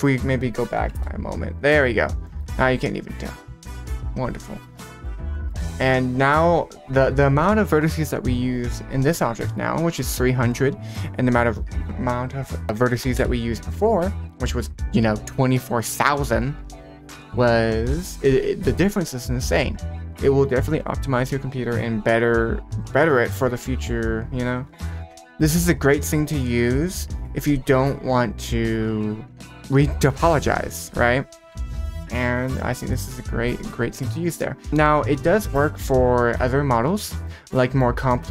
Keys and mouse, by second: 1.7 middle click, 2.2 middle click, 4.6 click, 4.9 middle drag, 5.3 middle click, 6.2 right click, 11.4-13.2 drag, 34.7 Delete, 35.8 alt+h, 36.8 shift+middle click, 37.1 shift+middle click, 37.5 middle drag, 37.9 middle click.